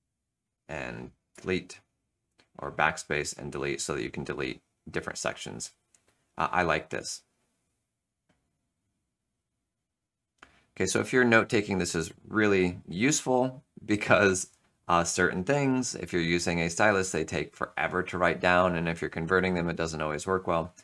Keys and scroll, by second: 1.2 BackSpace, 3.1 Delete.